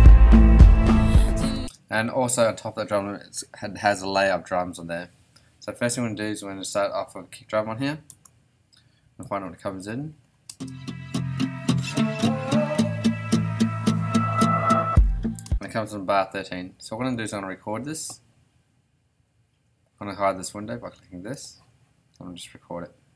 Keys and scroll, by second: 1.5 space, 8.1 Return, 10.5 space, 15.4 space, 16.0 ,.